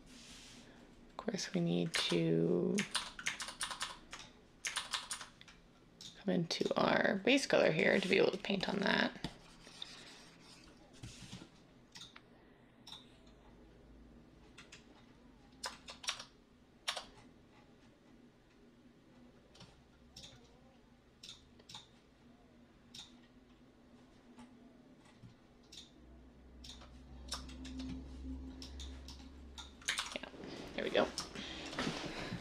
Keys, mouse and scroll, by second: 1.9 ctrl+z, 2.9 ctrl+z, 3.4 ctrl+z, 16.0 Tab, 16.8 Tab, 29.9 ctrl+z.